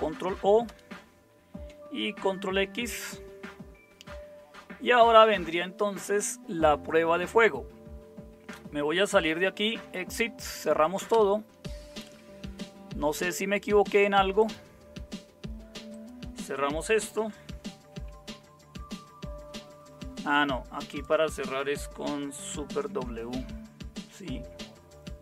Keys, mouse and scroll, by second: 0.7 Return, 2.8 ctrl+x, 9.2-10.4 typing, 11.1 Return, 18.0 shift+super+q, 22.7 super+w.